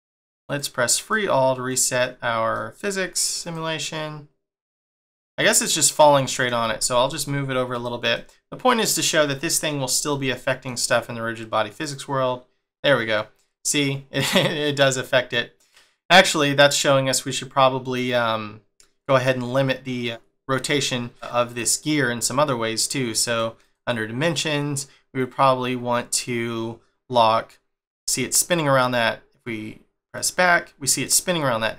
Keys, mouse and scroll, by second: 0.4 click, 0.8 click, 1.6 click, 2.2 scroll down 1, 2.5 middle click, 3.3 click, 4.9 click, 5.5 click, 6.1 middle click, 6.6 g, 8.0 middle click, 10.0 middle click, 11.7 click, 21.2 click, 21.4 click, 23.5 click, 28.0 middle click, 30.1 click, 30.7 middle click.